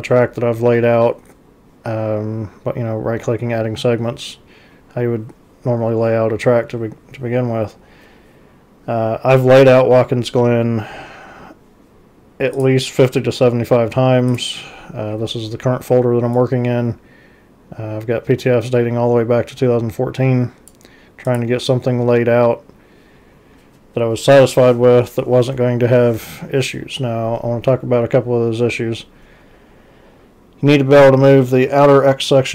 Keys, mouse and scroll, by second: 12.6 click, 14.3 click, 16.4-20.7 drag, 21.3 click.